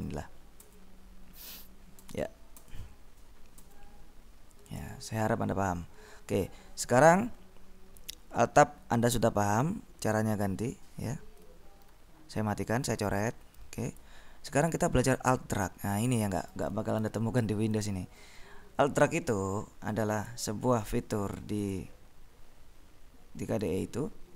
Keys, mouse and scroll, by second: 0.1 Tab, 1.6 Tab, 2.7 Tab, 3.8 Tab, 9.7-11.0 drag, 12.0 ctrl+b, 13.0 s, 14.0 click, 14.8-17.0 drag, 17.2 ctrl+b, 17.8 click, 20.5 click, 21.9 click, 23.8 click.